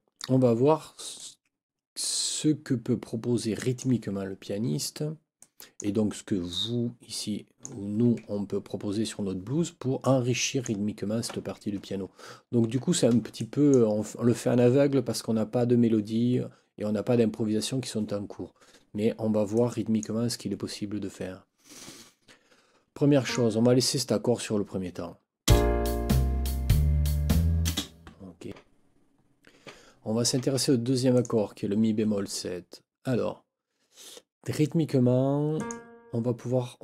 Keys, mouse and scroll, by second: 1.2-4.0 drag, 5.4 click, 6.5-7.8 drag, 8.8 ctrl+scroll down 2, 10.0 click, 12.3 ctrl+scroll up 2, 13.4 click, 19.5 click, 23.2 click, 25.4 space, 27.6 space, 31.1 click, 35.5 click.